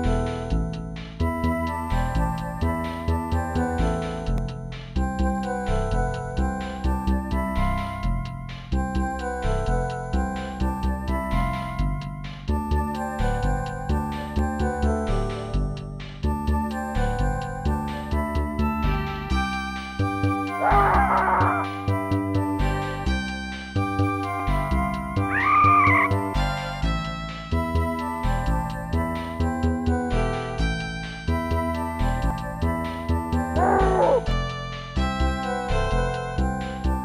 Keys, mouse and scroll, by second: 0.1 right click, 0.3 shift+right click, 0.7 right click, 0.8 shift+right click, 1.0 right click, 1.1 shift+right click, 1.4 right click, 1.5 shift+right click, 2.6 middle click, 4.1 right click, 4.2 shift+right click, 4.5 right click, 4.5 shift+right click, 4.7 right click, 4.8 shift+right click, 5.2 right click, 5.4 shift+right click, 5.7 right click, 5.8 shift+right click, 6.1 right click, 6.2 shift+right click, 6.8 right click, 6.9 shift+right click, 7.0 right click, 7.1 shift+double right click, 7.4 right click, 7.5 shift+right click, 7.9 right click, 8.0 shift+right click, 8.9 right click, 9.0 shift+right click, 9.2 right click, 9.3 shift+double right click, 9.5 right click, 9.6 shift+right click, 10.6 right click, 10.7 shift+right click, 11.0 right click, 11.1 shift+right click, 11.3 right click, 11.4 shift+right click, 11.8 right click, 11.9 shift+right click, 12.9 right click, 13.0 shift+right click, 13.2 right click, 13.3 shift+right click, 13.6 scroll down 2, 14.2 ctrl+s, 14.5 click, 15.2 middle click, 17.7 scroll up 2, 18.5 right click, 18.6 shift+right click, 18.9 right click, 19.0 shift+right click, 19.3 right click, 19.4 shift+right click, 20.0 right click, 20.1 shift+right click, 20.3 right click, 20.4 shift+right click, 20.8 right click, 20.9 shift+right click, 21.5 right click, 21.6 shift+right click, 22.1 right click, 22.2 shift+right click, 22.4 right click, 22.5 shift+right click, 23.3 right click, 23.4 shift+right click, 24.5 scroll down 2, 26.1 0, 29.0 click, 30.8 click, 32.2 click, 32.3 click, 34.1 click, 34.2 click, 34.8-35.2 typing, 35.4 Return.